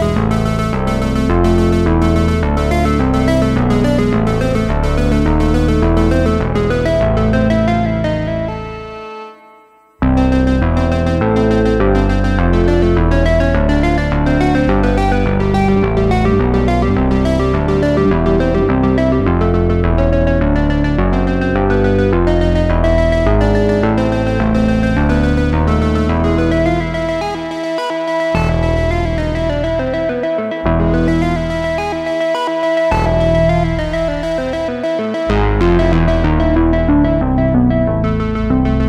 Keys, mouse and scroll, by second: 4.2-6.3 drag, 6.7-11.9 drag, 13.7 space, 14.3 drag, 14.7 s, 16.2 Tab, 17.0 s, 20.0 g, 21.8 g, 25.3 s, 27.3 alt+s, 29.1 Tab, 30.8 ctrl+s, 32.1 n, 33.3 n, 34.2 space, 36.2-38.8 scroll up 2.